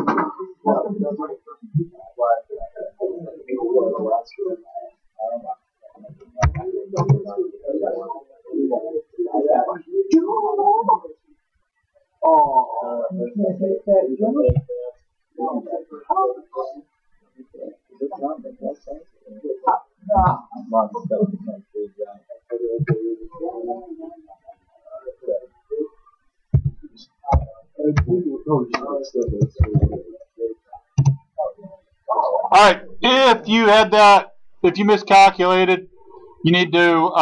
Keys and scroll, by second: 6.1-6.9 typing, 7.0 Return, 14.5 l, 20.2 p, 22.8 ctrl+z, 26.6 8, 27.4 ., 28.0 2, 29.4 BackSpace, 31.0 Return.